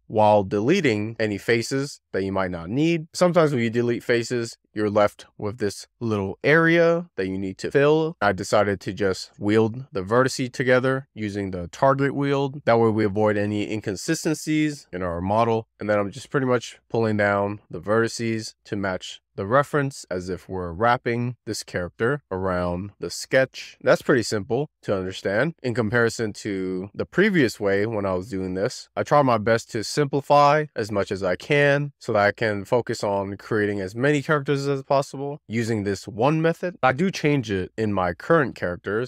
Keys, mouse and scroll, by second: 0.0 ctrl+r, 0.1 scroll up 2, 0.6 shift+middle click, 0.8 click, 1.2 x, 3.7 click, 4.3 x, 4.8 shift+middle drag, 4.9 scroll up 1, 5.0 scroll down 2, 5.1 ctrl+r, 5.2 scroll up 1, 5.3-6.0 click, 5.6 click, 5.8 click, 6.3 scroll down 3, 6.5 click, 7.1 click, 7.2 click, 7.4 click, 7.6 click, 8.0 click, 8.1 scroll up 3, 8.9 Tab, 9.0 click, 10.5 alt+q, 11.2 Tab, 11.5 click, 12.1 click, 14.0 Tab, 15.2 alt+q, 15.6 scroll down 2, 15.8 scroll up 4, 16.3 click, 17.1 click, 17.6 scroll down 1, 17.8 shift+middle click, 18.0 scroll up 4, 18.2 click, 20.0 shift+middle click, 20.2 click, 20.6 click, 21.5 click, 21.7 click, 22.8 click, 23.4 scroll down 2, 23.6 shift+middle click, 23.8 click, 24.0 click, 24.3 shift+middle click, 24.5 click, 24.6 click, 25.5 click, 26.6 click, 27.8 click, 28.5 click, 28.7 click, 29.3-29.6 shift+middle drag, 29.6 click, 30.3 click, 31.7 click, 31.9 click, 32.3 shift+middle click, 32.4 click, 33.0 shift+middle click, 33.2 click, 33.7 shift+middle drag, 33.9 click, 35.2 click, 35.8 click, 36.3 shift+middle click, 36.6 click, 37.3 click, 38.0 click, 38.9 click.